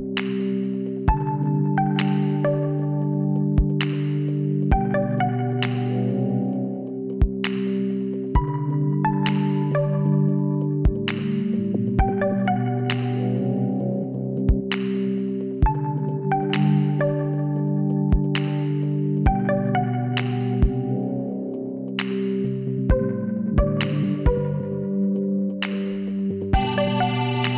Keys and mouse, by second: 0.3 KP_Divide, 3.1 KP_7, 3.7 z, 4.5 b, 8.1 KP_1, 10.8 click, 12.7 shift+s, 14.7 shift+a, 17.7 t, 19.0 click, 21.8-25.0 middle drag, 25.0-26.7 drag, 26.0 s.